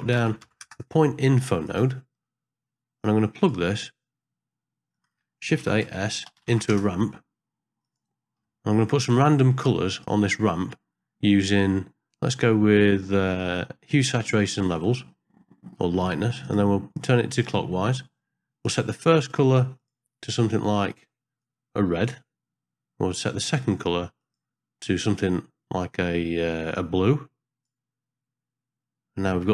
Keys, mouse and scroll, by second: 3.1 click, 4.9 click, 5.6 shift+a, 8.6 middle click, 10.0-12.4 drag, 13.5-14.8 drag, 16.5 click, 19.2 click, 23.4 click, 24.2 click, 29.4 middle click.